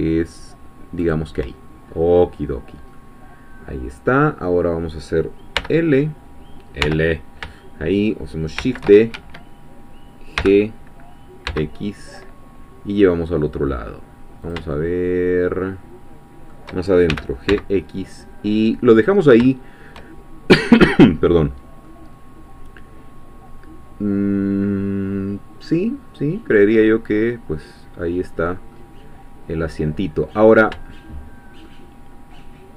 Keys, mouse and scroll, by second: 1.0 shift+click, 1.9-2.2 shift+scroll down 1, 2.9-5.6 middle drag, 5.6 l, 7.6 shift+middle click, 8.6 shift+d, 9.1 shift+Escape, 10.4 g, 11.5 x, 14.5 shift+click, 14.7-16.7 shift+middle drag, 17.1 shift+g, 17.5 shift+x, 18.9 click, 19.7 shift+scroll down 1, 21.1-21.9 scroll down 1, 21.9-29.1 middle drag, 29.1-29.4 scroll down 1, 29.6-29.9 scroll up 2, 31.7-32.7 shift+middle drag.